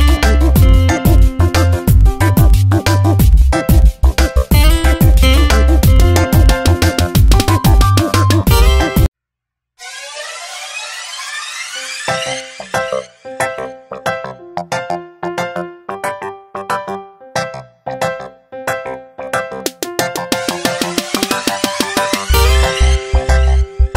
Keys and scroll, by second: 0.4 space, 6.2 Tab, 7.2 space, 9.0 F9, 10.1 Tab, 11.7 space, 13.0 space, 16.1 ctrl+shift+n, 16.4 Return, 16.7 alt+BackSpace, 17.5 ctrl+d, 18.4 v.